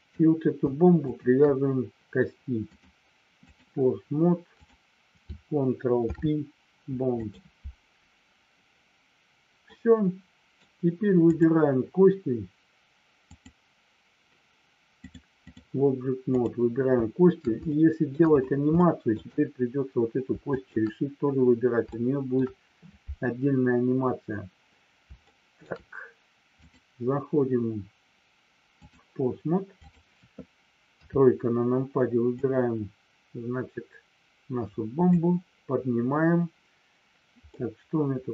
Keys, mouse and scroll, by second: 0.0 click, 1.1 shift+click, 2.6-3.6 drag, 4.6 click, 6.0 ctrl+p, 9.6 middle click, 11.2 click, 13.2 click, 15.0 click, 16.2 click, 17.8 shift+middle click, 18.9 shift+middle click, 20.5 shift+click, 21.9 shift+middle click, 25.2 shift+middle click, 26.8-29.0 drag, 29.9 click, 30.9 KP_3, 32.2-35.0 drag, 37.6-38.3 middle drag.